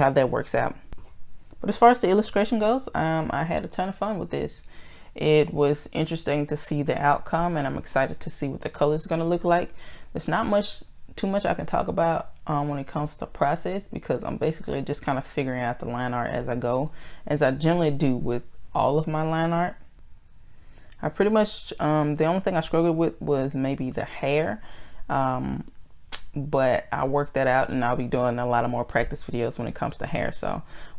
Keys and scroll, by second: 2.7 ctrl+z, 17.6 ctrl+z, 19.0 ctrl+z.